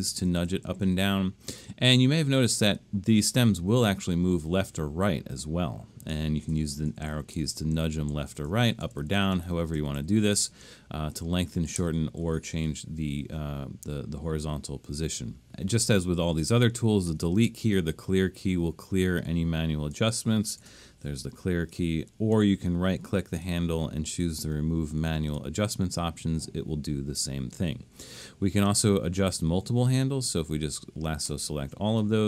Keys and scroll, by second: 0.1 Down, 0.3 Down, 0.5 Up, 0.6 Up, 0.8 Up, 1.0 Up, 6.5 Left, 6.7 Left, 6.9 Left, 7.1 Left, 7.3 Right, 7.8 Right, 8.1 Left, 8.3 Left, 8.5 Left, 8.6 Left, 8.8 Up, 9.0 Up, 9.1 Up, 9.3 Up, 9.5 Up, 9.8 Left, 10.0 Left, 10.3 Up, 10.5 Up, 11.1 Up, 11.7 Left, 11.9 Left, 12.2 Left, 12.6 Up, 17.1 BackSpace, 20.6 9.